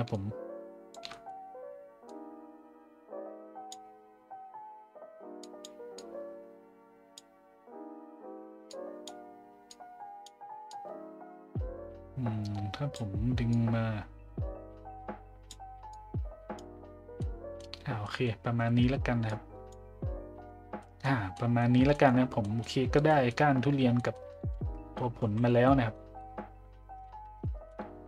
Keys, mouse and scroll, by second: 0.2 shift+click, 1.1 middle click, 2.1-3.7 drag, 5.4 click, 5.9-7.2 drag, 8.7 click, 9.7 click, 10.7-12.9 drag, 13.5-15.5 drag, 15.9 click, 17.2-17.6 middle drag, 18.0 middle drag, 19.2 click, 20.8 middle drag, 21.3 middle click, 21.9 shift+middle click, 22.4 middle drag, 23.1 middle drag, 24.0 middle drag, 24.5 shift+z, 25.2 z, 25.6 middle drag, 26.1 middle drag, 27.4 middle click.